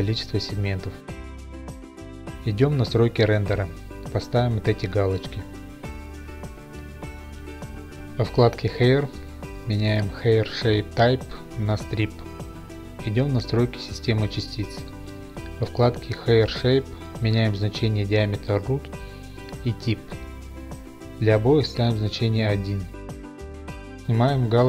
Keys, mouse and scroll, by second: 1.4 click, 1.4 KP_8, 3.3 click, 4.7 click, 5.3 click, 6.1 click, 8.5-8.9 scroll, 10.2 click, 10.8-11.5 scroll, 12.2 click, 14.6 click, 17.6 click, 19.5 click, 20.6 1, 21.2 Return.